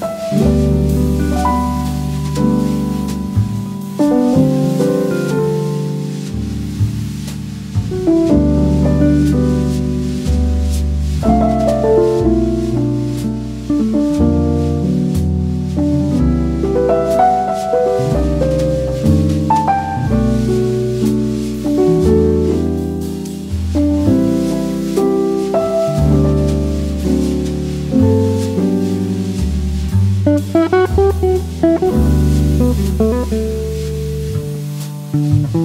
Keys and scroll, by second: 0.5 e, 4.7 v, 9.8 v, 19.4 super+f, 29.5 v, 32.4 v.